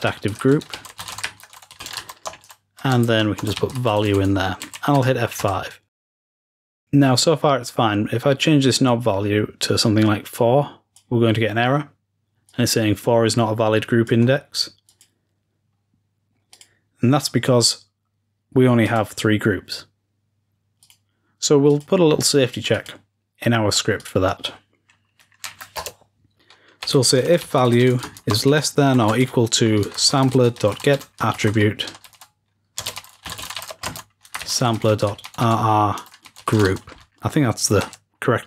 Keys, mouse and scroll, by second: 8.5 click, 12.4-16.2 drag, 16.4 click, 18.8-19.9 drag, 20.7-22.8 drag, 22.8-25.0 drag.